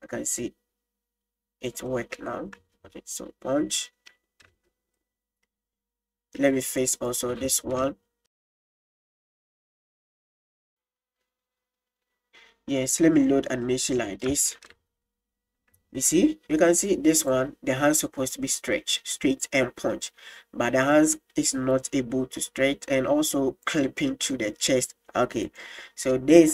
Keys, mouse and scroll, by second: 1.9 middle drag, 2.7 space, 5.0-6.5 middle drag, 7.1 right click, 7.3 middle drag, 8.8-10.0 drag, 10.2 middle click, 10.4 space, 10.7 click, 12.9-13.6 drag, 14.1 middle click, 14.4 space, 16.0 middle drag, 19.1 middle drag, 20.1 click, 23.9 middle click, 25.5 right click.